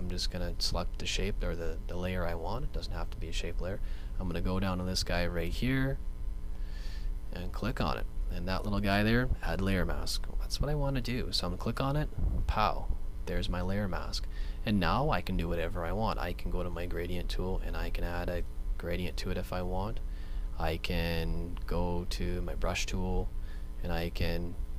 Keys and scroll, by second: 20.6 super+z.